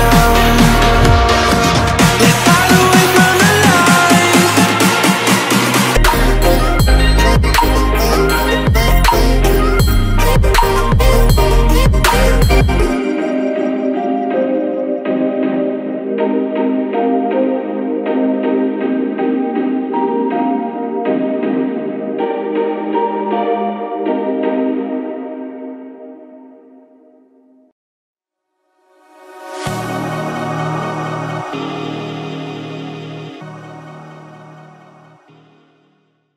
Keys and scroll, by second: 0.0 Return, 7.4 space, 13.5 space.